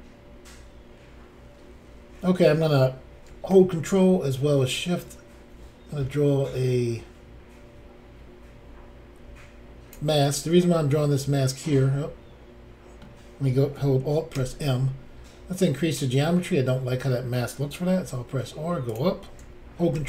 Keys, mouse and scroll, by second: 4.7 ctrl+click, 10.6 middle click, 14.0 alt+scroll up 1, 14.3 alt+m, 18.0 r, 18.9 click, 19.9 ctrl+r.